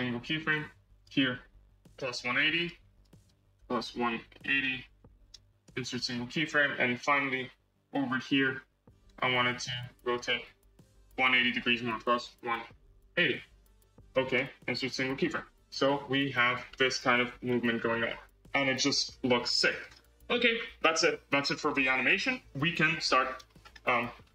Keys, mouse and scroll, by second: 0.8-4.9 drag, 5.5-7.0 right drag, 7.0-8.1 drag, 8.5-13.4 drag, 14.2-15.5 right drag, 15.5 space, 16.6-19.3 middle drag, 19.3-19.7 scroll down 4, 19.7-21.5 middle drag, 21.5 n, 21.9 scroll up 2, 22.8 KP_1, 23.5 scroll up 4, 24.1 scroll down 3.